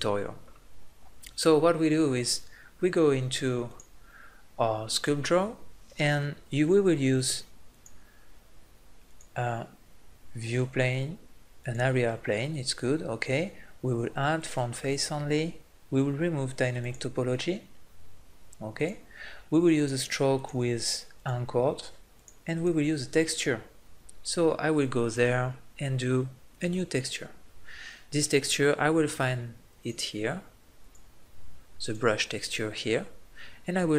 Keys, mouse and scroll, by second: 3.7-15.2 drag, 15.2-17.9 middle drag, 17.9 click, 18.7-29.3 drag, 29.8-32.6 drag, 33.9 click.